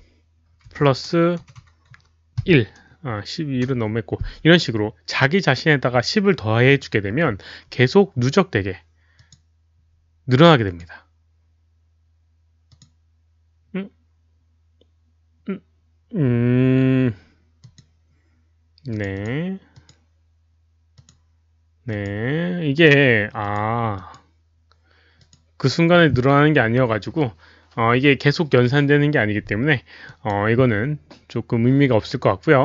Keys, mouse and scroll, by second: 0.7 KP_Add, 1.4 Delete, 3.4-4.1 typing, 3.6 click, 6.7 click, 8.1-9.1 typing, 8.4 click, 9.1 KP_Add, 9.1 ctrl+v, 9.1 click, 10.6 click, 10.7 KP_Add, 12.7 click, 13.2 o, 14.4 click, 17.6 click, 18.9 click, 19.1 click, 19.7 click, 20.9 click, 21.9 click, 23.4 click, 23.9 click, 25.1 click, 30.0 click.